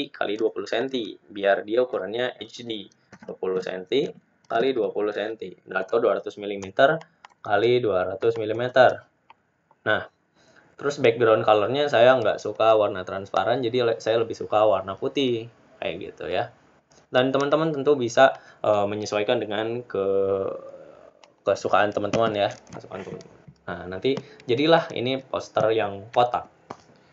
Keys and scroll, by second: 5.6-6.3 typing.